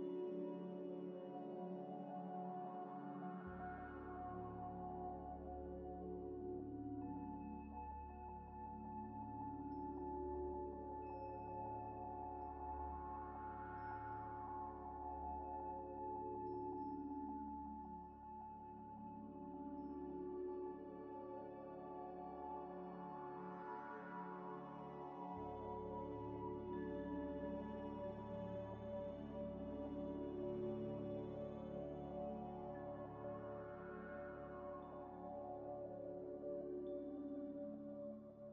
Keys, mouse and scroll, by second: 0.0-4.1 typing, 4.7 scroll up 1, 5.9 scroll up 1, 5.9 scroll down 1, 6.0 scroll up 1, 7.0-7.9 typing, 8.8 Tab, 9.0 1, 9.7 e, 10.9 e, 10.9 e, 12.3 e, 13.8 e, 14.8 Tab, 14.8 z, 15.3 middle click, 15.7 scroll down 1, 16.1 g, 16.2 x, 17.7 middle click, 18.1 scroll down 1, 19.0 shift+click, 19.9 scroll down 1, 20.1 shift+click, 20.8 shift+click, 21.3 shift+d, 21.4 shift+click, 21.7 g, 21.8 z, 23.6 shift+click, 25.4 shift+click, 26.3 m, 27.7-30.6 typing, 30.7 Return, 30.8 Return, 33.8 double click.